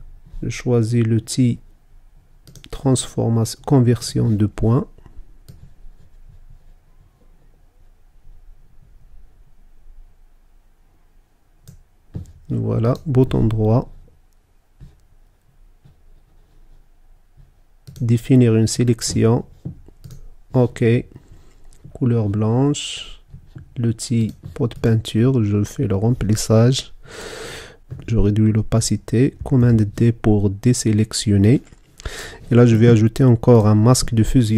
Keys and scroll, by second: 29.6 super+d.